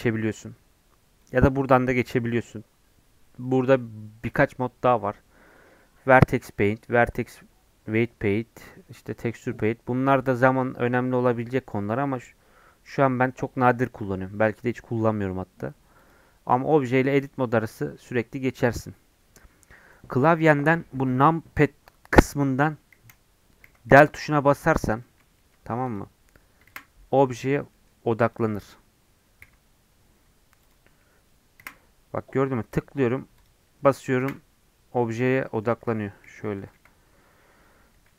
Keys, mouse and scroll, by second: 0.4 Tab, 1.2-18.2 drag, 18.2 Tab, 18.4 Tab, 18.7 Tab, 19.1 Tab, 22.9 KP_Decimal, 23.6 KP_Decimal, 23.8 KP_Decimal, 24.6-25.0 scroll down 7, 25.0 middle click, 25.8 click, 26.6 KP_Decimal, 27.7 middle click, 28.2-29.4 drag, 29.4 KP_Decimal, 30.6 click, 31.6 KP_Decimal, 32.7 middle click, 33.3 click, 34.2 KP_Decimal, 35.4 middle click, 36.2 KP_Decimal, 36.5 KP_Decimal, 36.7 KP_Decimal.